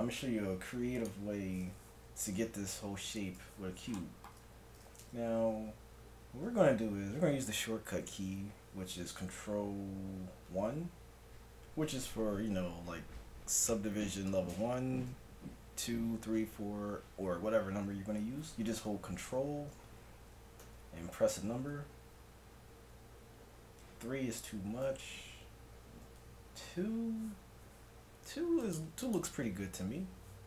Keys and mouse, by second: 10.5 ctrl+1, 20.7 ctrl+2, 23.4 ctrl+3, 24.9 ctrl+2, 28.6-30.4 drag.